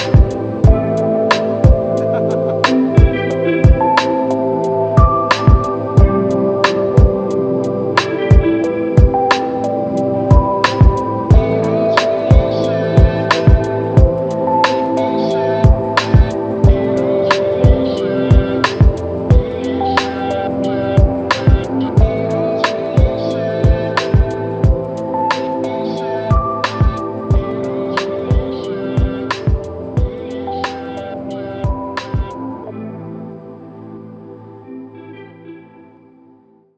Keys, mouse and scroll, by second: 0.4 double click, 4.7 ctrl+alt+click, 7.2 double click, 8.4 alt+click, 9.6 double click, 10.5 alt+click, 12.7 ctrl+alt+click, 18.3 alt+click, 20.2 alt+click, 25.2 typing, 29.1 typing, 35.5 alt+click.